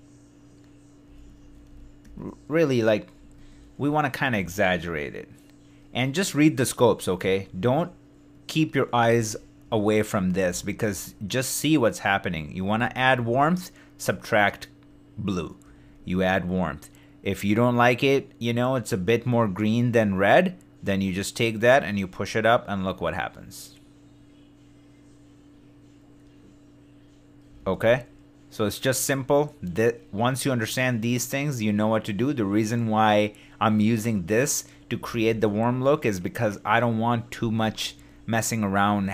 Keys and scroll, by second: 9.1 super+d, 27.6 super+d, 35.1 super+d.